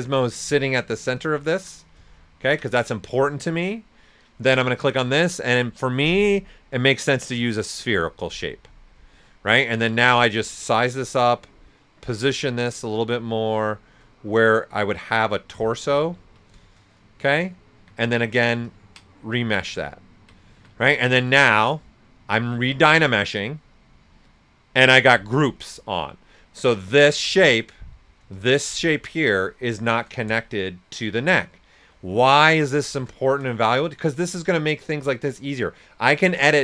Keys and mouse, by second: 2.0-4.2 ctrl+right drag, 4.2 click, 7.7 click, 8.9 right click, 9.8 w, 10.5-12.3 drag, 12.3-14.3 right drag, 14.3-16.1 drag, 15.8-16.5 typing, 16.1 ctrl+right click, 17.7 q, 18.1 ctrl+click, 19.5 alt+right click, 19.9 ctrl+right click, 20.1-20.8 typing, 27.0 typing, 27.4 right click, 28.3-33.1 shift+drag, 33.1 right click, 33.6-36.6 shift+drag.